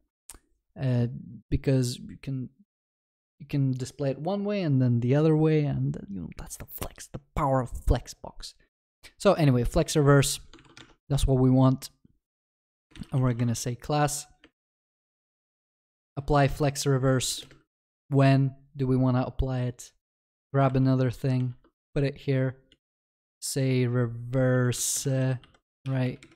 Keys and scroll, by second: 13.4 Return, 16.0 Return, 20.7 ctrl+c, 25.4 ctrl+s.